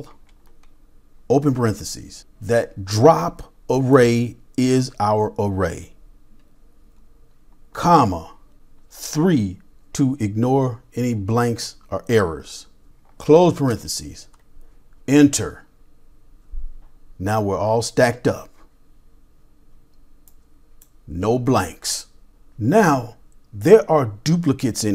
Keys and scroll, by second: 0.0-1.9 typing, 7.8 typing, 9.1 typing, 13.4 typing.